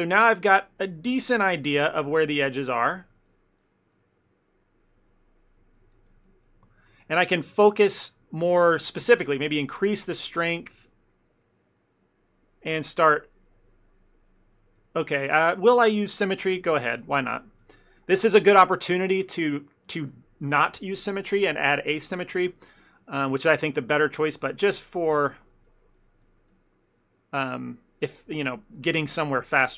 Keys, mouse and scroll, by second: 0.1 middle click, 0.2 shift+middle click, 0.3 shift+middle click, 1.5 middle click, 2.0 middle click, 2.3 ctrl+middle click, 2.6 click, 2.7 click, 3.3 click, 4.2 click, 4.3 shift+middle click, 4.9 click, 5.9 click, 6.0 click, 6.8 ctrl+middle click, 7.0 middle click, 7.3 f, 7.6 shift+middle click, 7.8 ctrl+middle click, 8.4 f, 8.7 shift+middle click, 9.2 shift+f, 9.9 middle click, 10.7 ctrl+middle click, 11.8 middle click, 12.2 ctrl+middle click, 12.4 middle click, 13.1 click, 13.5 click, 13.8 click, 14.1 middle click, 14.7 click, 14.9 click, 15.6 shift+middle click, 16.7 click, 16.9 click, 17.9 click, 18.1 click, 18.5 click, 18.6 ctrl+middle click, 22.9 ctrl+middle click, 23.3 shift+middle click, 23.5 ctrl+middle click, 24.3 click, 24.5 click, 25.2 click, 25.2 shift+middle click, 25.8 click, 26.1 click, 27.4 click, 27.5 ctrl+middle click, 27.6 middle click, 27.9 middle click, 28.0 shift+middle click, 28.2 shift+middle click, 28.7 middle click, 29.0 ctrl+middle click, 29.2 middle click, 29.5 shift+middle click.